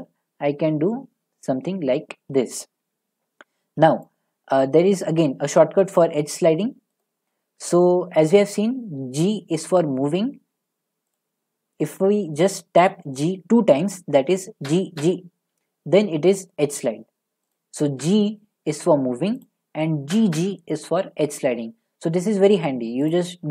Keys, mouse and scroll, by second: 4.0 click, 6.5 middle click, 6.6 middle click, 7.0 click, 7.4-9.0 scroll, 9.0 g, 11.2 right click, 14.7 g, 15.0 g, 17.5 right click, 18.0 g, 19.4 right click, 20.1 g, 20.4 g, 23.1 right click.